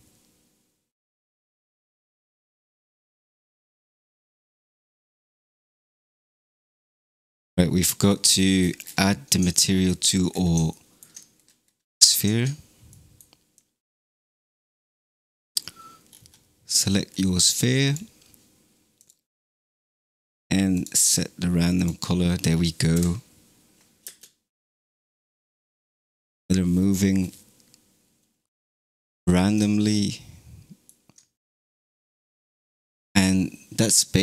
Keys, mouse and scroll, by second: 4.2 space, 6.5 scroll down 3, 7.8-8.4 middle drag, 8.4-9.5 scroll down 17, 9.5 shift+middle click, 10.3-10.7 scroll down 3, 10.7-11.3 shift+middle drag, 11.3-12.9 scroll down 4, 12.9 middle click, 13.5 click, 14.9 scroll down 3, 15.5-16.3 scroll up 9, 17.0 scroll down 2, 17.7 click, 18.9-21.9 drag, 22.8 KP_0, 24.1 space, 25.0 scroll up 4, 25.9 scroll down 1, 30.0-33.0 shift+middle drag.